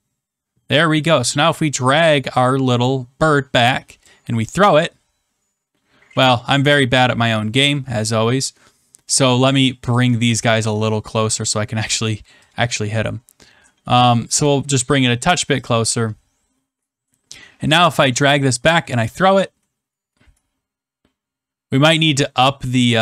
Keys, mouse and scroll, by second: 4.0 click, 8.0 click, 9.9 shift+click, 10.4-10.9 scroll, 11.2 middle click, 14.2 shift+click, 15.6 click, 18.7 click.